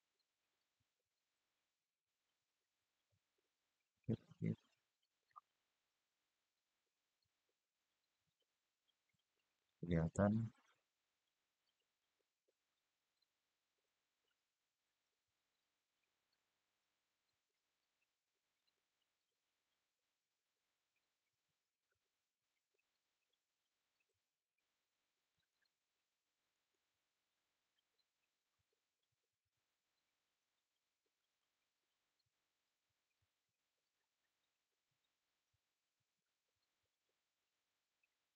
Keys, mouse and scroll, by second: 3.1 click, 5.0 click, 6.1 click, 9.9 click, 11.7 click, 15.0-17.2 scroll up 4, 17.2 click, 18.3 click, 22.2 click, 25.1 click, 26.2 click, 28.1-28.8 scroll down 1, 28.8-29.8 scroll up 1, 30.9 click, 32.9-35.9 drag, 38.0-38.3 scroll up 1.